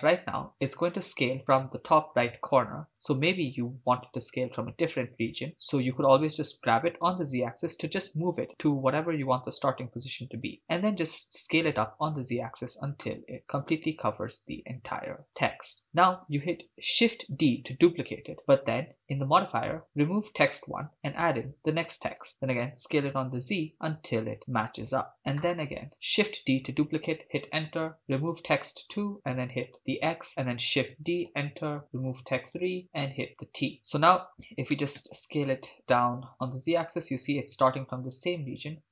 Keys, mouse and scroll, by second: 3.1 click, 6.6 g, 7.1 z, 10.4 click, 10.8 s, 11.0 z, 15.4 click, 17.1 shift+d, 17.3 Return, 20.2 click, 20.8 click, 22.6 s, 22.8 z, 25.1 click, 26.4 shift+d, 27.1 Return, 28.2 click, 28.8 click, 30.8 shift+d, 31.2 Return, 32.7 click, 33.7 middle click, 34.3 Tab, 34.7 s, 35.0 z.